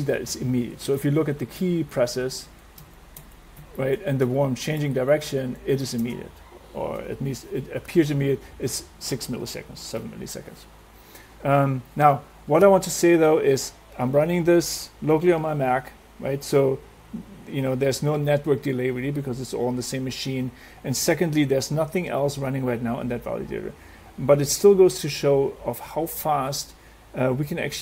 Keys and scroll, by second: 0.1 Right, 0.2 Down, 0.6 Left, 0.8 Right, 1.0 Up, 1.3 Left, 1.6 Up, 1.7 Right, 1.9 Down, 2.5 Right, 2.8 Up, 3.2 Left, 3.6 Down, 4.0 Right, 4.3 Up, 5.0 Left, 5.2 Down, 5.6 Right, 5.8 Up, 6.0 space.